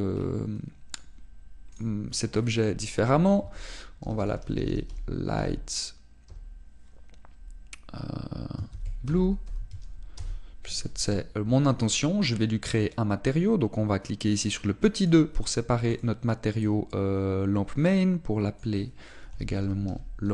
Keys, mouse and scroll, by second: 16.0 click, 16.0-20.3 scroll up 2.